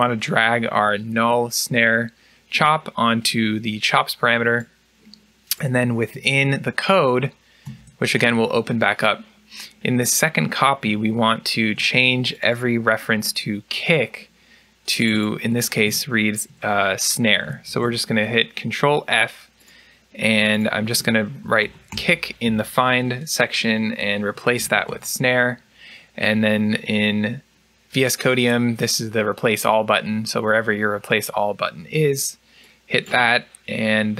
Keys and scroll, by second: 7.5 ctrl+e, 17.5 ctrl+f, 21.3 typing, 23.4-24.7 typing.